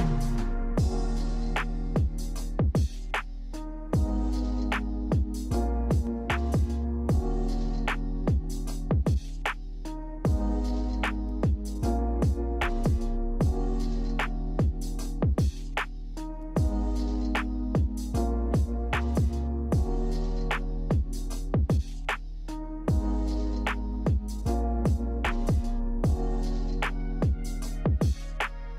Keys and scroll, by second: 12.6 Delete.